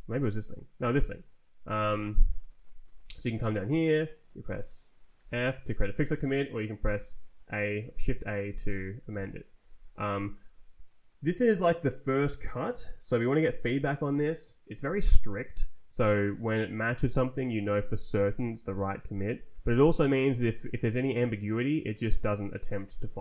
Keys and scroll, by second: 1.9 Escape, 2.3 Left, 2.8 Right, 5.1 shift+f, 5.9 Escape, 7.0 shift+a, 9.0 Escape, 9.5 Left.